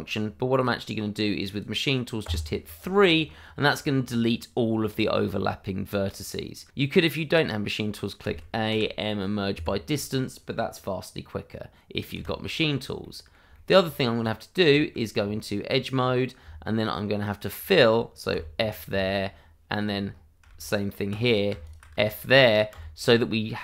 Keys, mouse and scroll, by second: 1.5 click, 2.2 3, 5.3 shift+middle click, 8.2 a, 9.5 Escape, 12.1 /, 13.0 middle click, 14.1 scroll up 1, 14.6 shift+middle click, 15.2 Tab, 15.9-16.4 scroll up 1, 17.2 click, 18.3 f, 18.6 scroll down 1, 18.9 shift+middle click, 20.0 scroll up 1, 21.2 click, 22.1 middle click, 22.7 f.